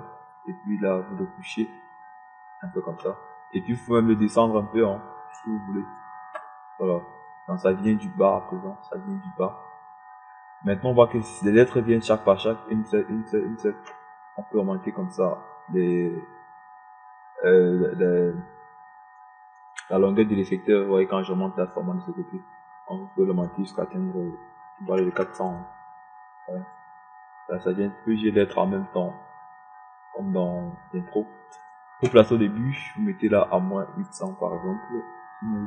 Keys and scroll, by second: 26.8 KP_4, 27.2 KP_0.